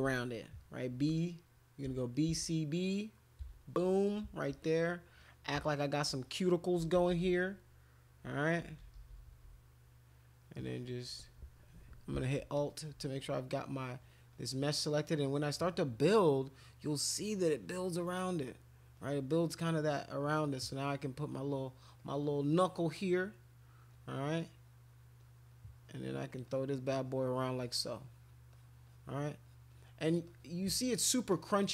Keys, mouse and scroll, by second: 1.0 v, 1.8 b, 2.3 c, 3.4 b, 4.5 click, 5.2 click, 5.6 alt+click, 6.8 [, 7.0 [, 7.2 [, 7.3 [, 8.6-9.4 typing, 10.1-11.2 drag, 12.5 alt+click, 13.2 click, 14.0 click, 14.3 click, 14.6 click, 15.4 click, 15.6 click, 16.0 click, 16.6 click, 16.9 click, 17.5 click, 17.7 click, 17.9 click, 18.0 click, 18.3 click, 19.0 click, 19.4 click, 20.0 click, 20.2 click, 20.5 click, 21.2 click, 21.6 click, 22.0 click, 22.9 click, 23.0 click, 23.2 click, 24.0 click, 24.2 click, 24.4 click, 25.2 click, 26.0 click, 26.5 click, 26.9-28.2 drag, 28.5 click, 28.9 click, 29.5 click, 29.7 click, 30.3 click, 31.3 click.